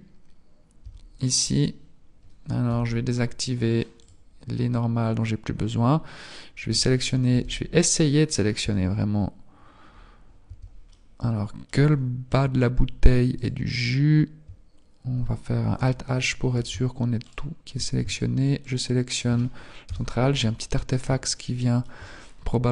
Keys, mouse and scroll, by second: 0.4 scroll up 2, 0.6 Tab, 1.2-1.6 scroll down 2, 3.7 n, 3.9 click, 5.6-5.9 scroll down 2, 7.1 n, 8.4 b, 10.9 middle click, 11.9 scroll up 3, 13.4 alt+right click, 13.4-14.1 scroll up 1, 15.8 alt+h, 17.2 alt+shift+right click, 18.6 shift+right click, 19.7 KP_1, 20.6-21.2 scroll up 3, 21.2 shift+middle click, 22.5 click.